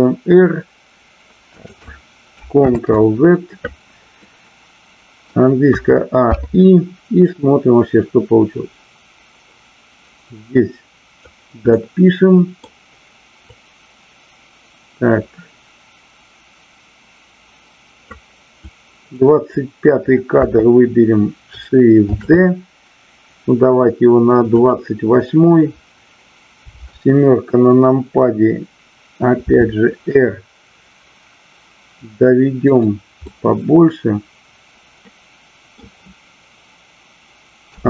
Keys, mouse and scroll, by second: 1.5 click, 2.7 ctrl+z, 4.1-5.4 middle drag, 7.2-11.3 drag, 11.6-12.6 middle drag, 13.5-18.0 drag, 18.6-19.1 drag, 22.1 shift+d, 24.5 click, 26.7 KP_7, 29.4 r, 32.7 click, 33.3-35.8 middle drag.